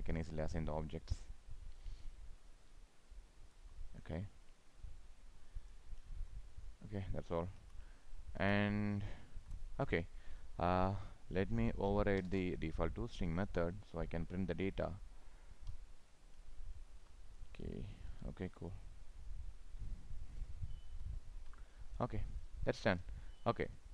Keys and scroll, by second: 9.3 ctrl+shift+f, 9.7 ctrl+s, 13.3 alt+shift+s, 20.9 ctrl+d, 21.3 ctrl+s.